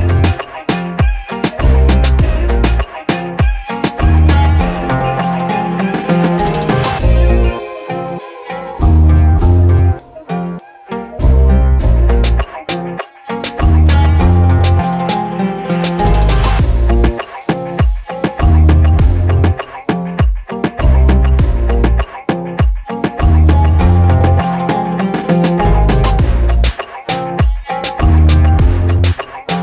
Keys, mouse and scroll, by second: 1.7 alt+click, 2.1 scroll up 1, 2.4 alt+click, 3.3-4.2 scroll up 3, 4.4 alt+middle click, 4.8-5.4 scroll up 4, 5.5 middle click, 5.9 alt+middle click, 6.3 alt+middle click, 6.6-7.2 scroll down 4, 7.3 alt+click, 8.3 scroll down 2, 8.5 alt+click, 9.2 scroll down 2, 9.5 alt+middle click, 9.8 click, 11.1 click, 11.5 middle click, 11.5 scroll down 1, 12.8 click, 15.8 click, 16.6 alt+click, 17.0 scroll down 1, 17.3 alt+click, 17.6-18.1 scroll up 3, 18.5 alt+click, 19.7-20.2 scroll up 8, 20.2 alt+click, 21.9 alt+click, 23.5-24.1 drag, 24.9 scroll down 2, 25.3-25.8 alt+drag, 25.9 scroll down 2, 26.2-26.5 alt+drag, 26.7-27.1 scroll up 3, 27.3 alt+middle click, 27.6-28.1 scroll up 2, 28.3 alt+middle click, 29.0 alt+middle click, 29.0 alt+scroll down 1, 29.3 middle click, 29.5-29.6 alt+drag.